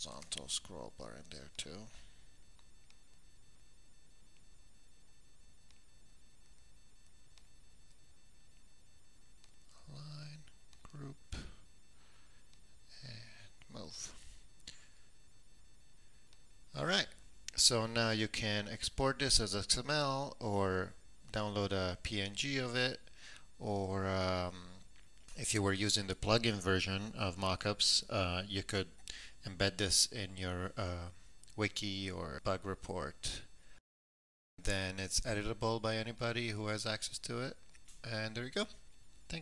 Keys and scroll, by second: 0.0-1.0 typing.